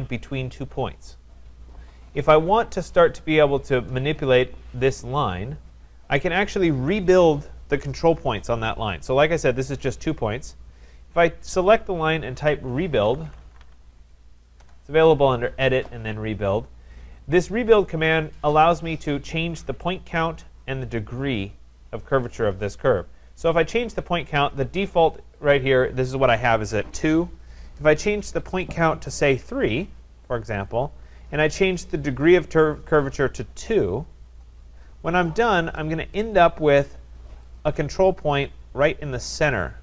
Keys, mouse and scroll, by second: 12.7-14.1 typing, 14.6 Return, 17.7 click, 19.6-22.8 drag, 24.0-29.1 drag, 29.4 3, 36.3 click, 37.6 click, 38.4 click, 39.5 click.